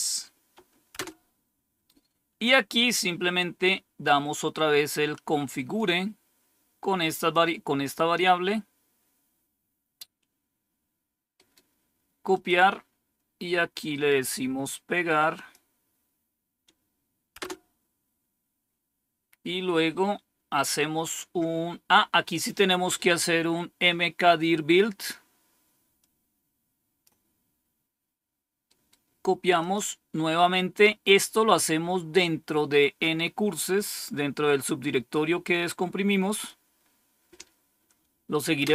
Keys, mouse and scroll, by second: 0.9 Return, 5.7-7.3 drag, 11.3 right click, 12.1 right click, 12.2 click, 13.8 right click, 15.2 click, 17.3 Return, 19.2-20.4 scroll down 1, 25.9-27.0 drag, 28.6 right click, 29.5 click, 34.7 right click, 36.2 click, 38.5 Return.